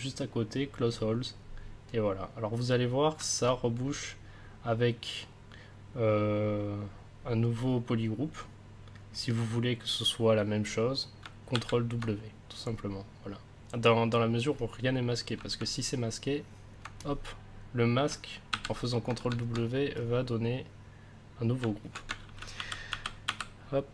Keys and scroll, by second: 11.5 ctrl+w, 18.5 ctrl+w, 22.2 ctrl+z.